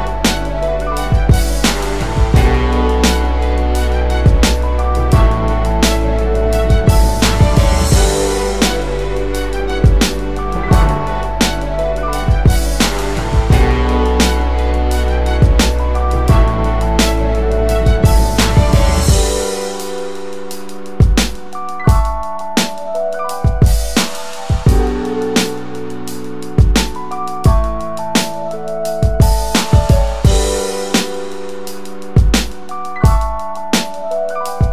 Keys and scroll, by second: 10.3 space, 21.0 space.